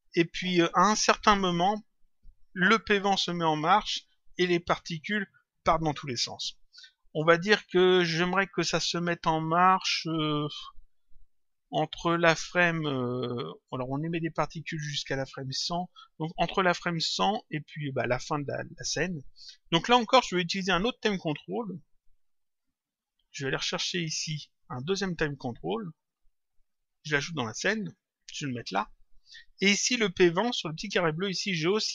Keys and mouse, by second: 13.7 click, 22.0 click, 23.1 click, 25.2 click, 27.9 click, 30.9 click.